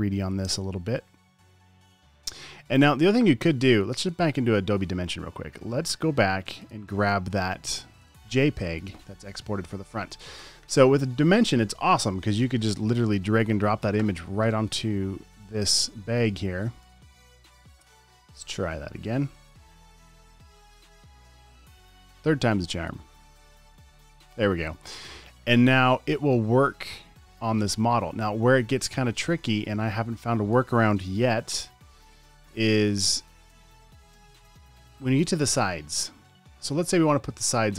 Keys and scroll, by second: 31.4 super+z.